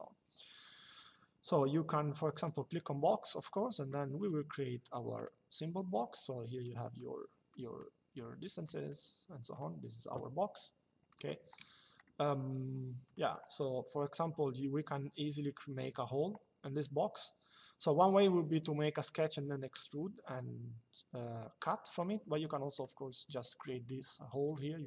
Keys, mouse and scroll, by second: 2.0 click, 6.4 click, 8.3 click, 10.8 click, 11.8 middle click, 21.7 click, 24.2 click.